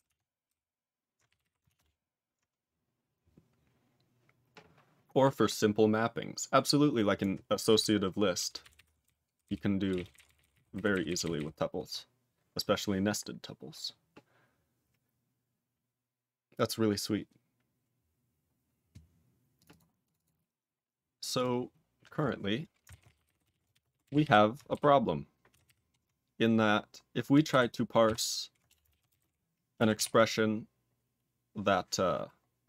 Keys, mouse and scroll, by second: 4.6 ctrl+Return, 8.6 ctrl+=, 9.0 ctrl+n, 9.4 ctrl+n, 9.8 ctrl+space, 9.9 ctrl+e, 9.9 ctrl+n, 10.1 ctrl+e, 10.2 ctrl+n, 10.3 ctrl+e, 10.4 ctrl+n, 10.5 ctrl+e, 10.5 ctrl+n, 10.7 ctrl+g, 10.9 ctrl+n, 11.0 ctrl+n, 11.1 ctrl+a, 11.2 ctrl+n, 11.4 ctrl+n, 13.8-14.2 scroll down 3, 19.5 click, 19.6 double click, 19.7 double click, 20.0 click, 20.1 double click, 21.0 scroll down 5, 21.3 click, 21.6-22.1 scroll down 6, 22.1 click, 22.8-24.7 typing, 25.5 ctrl+r, 25.6 ctrl+r, 27.5 ctrl+s, 28.0 ctrl+s, 28.6 Return, 28.8 ctrl+a, 29.0 ctrl+space, 29.1 ctrl+g, 29.9 ctrl+s, 30.4-31.0 scroll down 7, 32.6 click.